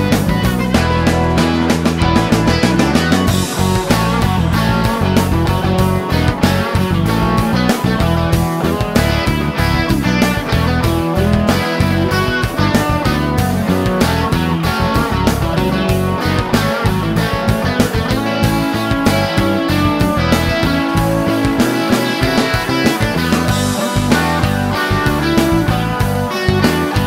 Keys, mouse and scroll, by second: 0.5 shift+right click, 4.0 click, 4.9 click, 6.4 ctrl+s, 10.1-12.1 drag, 12.7 click, 15.2 click, 17.3 click, 19.6 click, 21.4 click, 22.2 click, 23.9 click, 24.7 click, 25.2-25.6 scroll up 2, 25.9-26.4 scroll up 2, 26.5 scroll up 2, 26.5 scroll down 2, 26.6 scroll up 2.